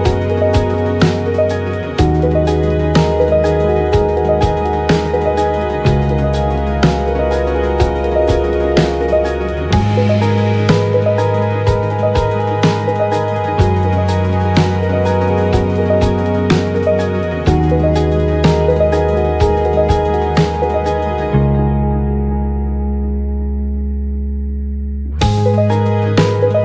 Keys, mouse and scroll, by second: 1.7 KP_1, 2.3-6.5 drag, 2.3-16.3 right drag, 6.6 KP_1, 8.3-9.6 drag, 8.3-15.0 middle drag, 10.2 KP_1, 11.1-12.6 drag, 13.4 shift+click, 16.0 click, 16.0-22.8 middle drag, 17.6-23.9 drag, 23.9-25.4 middle drag, 25.4 click, 25.9 middle click, 26.2-26.6 drag.